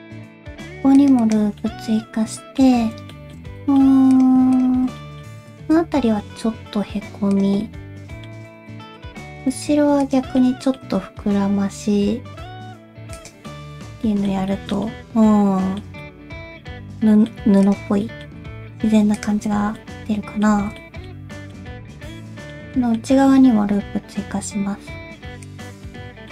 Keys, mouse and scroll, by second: 1.6 middle click, 3.1 shift+middle click, 3.6 middle click, 4.1 click, 4.5 shift+click, 5.0 middle click, 5.5 shift+click, 5.8-6.2 scroll up 1, 6.3 alt+s, 7.6 middle click, 8.7 shift+middle click, 9.3 click, 10.0 ctrl+click, 10.4 middle click, 11.1 alt+s, 13.5 middle click, 14.5 shift+middle click, 14.8 middle click, 16.0 middle click, 17.6 click, 18.0 middle click, 18.4 g, 19.6 alt+z, 19.8 middle click, 20.6 alt+z, 20.7 g, 20.8 middle click, 21.3 middle click, 21.6 2, 21.7 middle click, 22.7 middle click, 23.6 ctrl+r, 26.0 middle click.